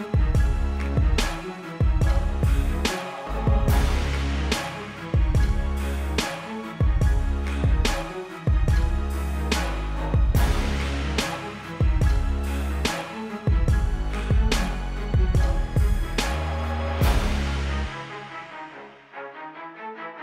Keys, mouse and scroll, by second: 0.3 click, 2.2 ctrl+z, 2.7 shift+click, 3.2 click, 4.4 z, 4.7 click, 5.8 i, 6.1 click, 11.6 click, 12.0 click, 12.4 alt+click, 12.7 click, 13.2 v, 13.3 click.